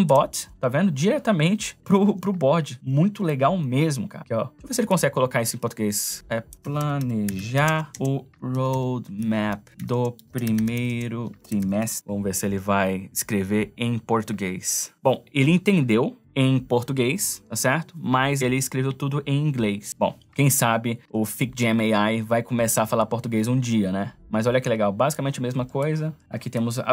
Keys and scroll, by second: 6.3-12.3 typing, 21.1 space.